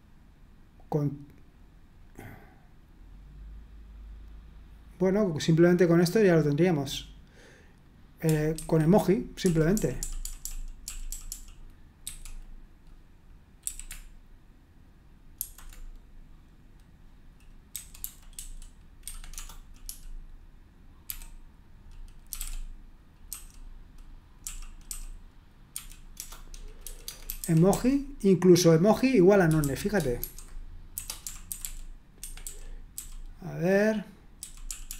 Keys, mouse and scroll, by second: 8.6 super+1, 9.4-12.0 typing, 13.6 typing, 15.4 typing, 17.5-21.1 typing, 19.0 Escape, 22.1-23.3 typing, 24.4-28.2 typing, 29.2-32.9 typing, 34.1-34.9 typing.